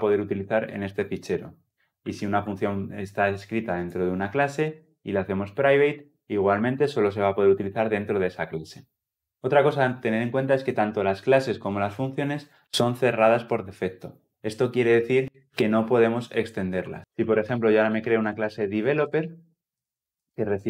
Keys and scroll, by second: 1.4 ctrl+z, 17.7 Return.